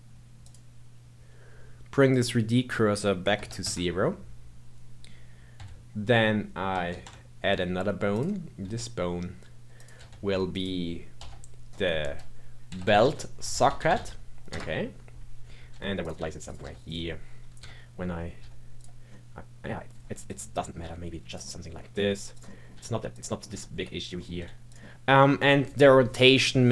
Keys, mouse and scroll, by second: 0.4 click, 2.1-5.1 drag, 5.5 n, 6.9 shift+a, 8.1 click, 8.6 s, 11.1 F2, 15.7-18.4 typing, 19.1 middle click, 19.9 s, 20.5 middle click, 20.8 r, 21.4 middle click, 22.0 g, 22.4 middle click, 22.7 r, 23.3 middle click, 23.5 g, 24.1 middle click, 24.3 r, 24.8-26.7 middle drag.